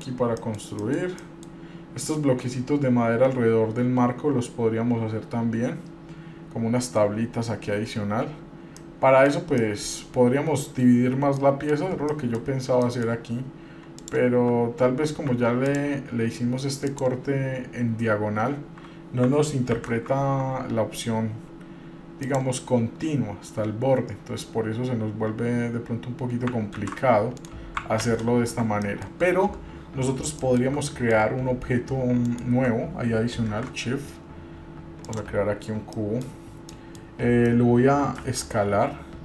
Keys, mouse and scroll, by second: 0.1 middle click, 0.3 scroll down 1, 0.6 middle click, 1.0 middle click, 1.4 middle click, 8.9 middle click, 9.8 middle click, 11.6 middle click, 12.3 shift+middle click, 13.0 middle click, 14.2 click, 15.9 ctrl+click, 17.0 ctrl+click, 19.9 ctrl+r, 28.8 ctrl+z, 29.0 middle click, 30.6 shift+middle click, 31.0 middle click, 32.5 shift+right click, 33.7 shift+a, 35.8-36.1 scroll down 1, 36.1 middle click, 36.5-36.8 scroll down 3, 36.9 middle click, 38.4 s.